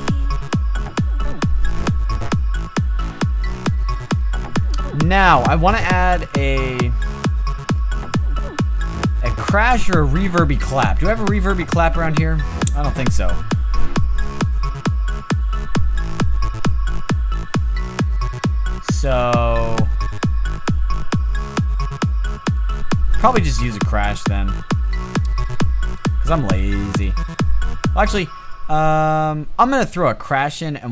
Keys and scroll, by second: 27.7 space.